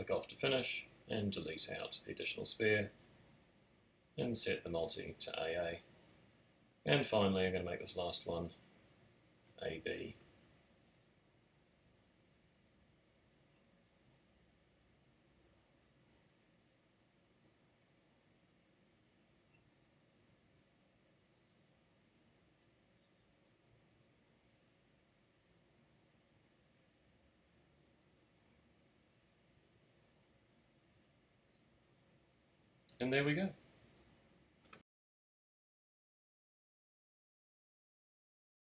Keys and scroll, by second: 1.3 BackSpace, 4.3 typing, 4.7 Tab, 5.6 space, 7.6 typing, 7.7 alt+shift+super+n, 8.7 Tab, 12.1 b, 13.0 BackSpace, 13.3 shift+b, 14.7 Return, 27.5-28.3 typing, 28.3 Return, 32.2 BackSpace, 33.5 super+6.